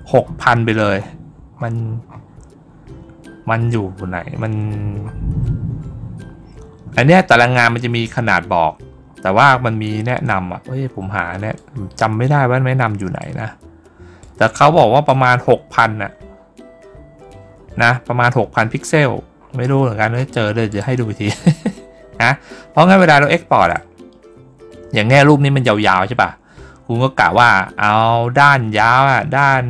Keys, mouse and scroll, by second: 7.2 middle click, 7.2 scroll down 1, 8.9 middle click, 8.9 scroll down 1, 10.0 middle click, 10.0 scroll down 1, 11.4-12.3 drag, 12.6-13.0 drag, 14.1 click, 14.4 click, 15.7 middle click, 15.7 scroll down 1, 18.6 middle click, 18.6 scroll down 2, 19.3 scroll up 1, 19.5 scroll down 1, 20.5 click, 23.5 click.